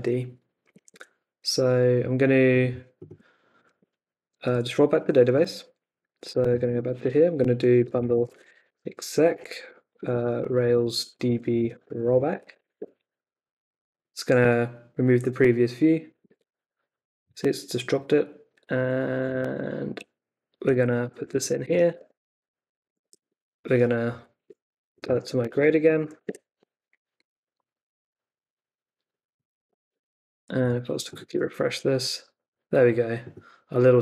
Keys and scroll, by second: 3.6 super+Tab, 6.4 shift+super+[, 7.5-13.1 typing, 19.3 super+Tab, 20.7 super+a, 21.2 super+v, 21.6 super+s, 21.9 super+Tab, 24.1 Up, 24.4-26.6 typing, 29.9 super+Tab, 31.2 super+r.